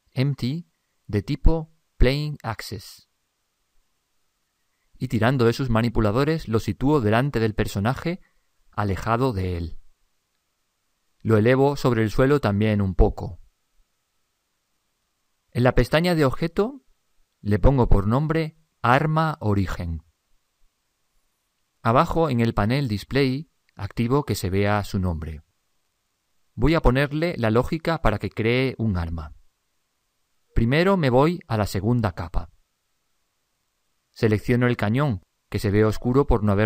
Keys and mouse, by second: 3.0-5.6 middle drag, 5.6 click, 9.6 click, 11.6 click, 14.6-16.3 middle drag, 16.5 click, 18.1-20.1 middle drag, 23.0 click, 24.8 click, 26.0-33.5 middle drag, 33.5 click, 35.7-36.6 right drag.